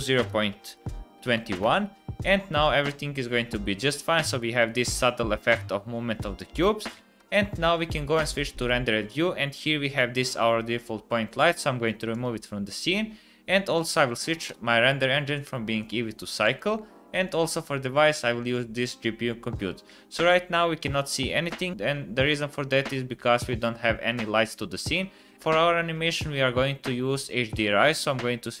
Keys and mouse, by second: 4.9 space, 7.9 space, 9.9 click, 11.4-12.2 typing, 15.7-16.7 drag, 17.2-18.7 drag, 19.9-21.5 middle drag, 21.7-22.4 middle drag, 22.5-23.4 middle drag, 23.7-24.1 middle drag.